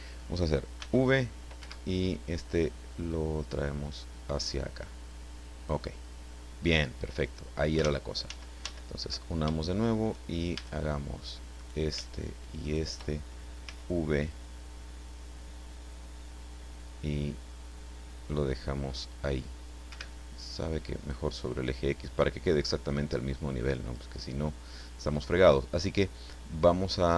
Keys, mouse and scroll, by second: 0.8 v, 1.6 Escape, 3.1-4.7 drag, 7.8 ctrl+z, 10.5 shift+a, 11.6 right click, 12.6 shift+right click, 13.6 v, 19.9 Escape, 21.1-24.1 drag.